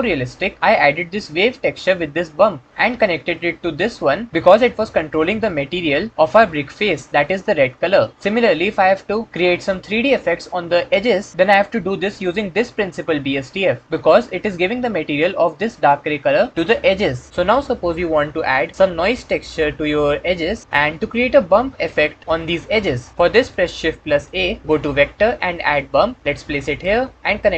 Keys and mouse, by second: 9.7-10.6 drag, 23.5 click, 24.2 shift+a.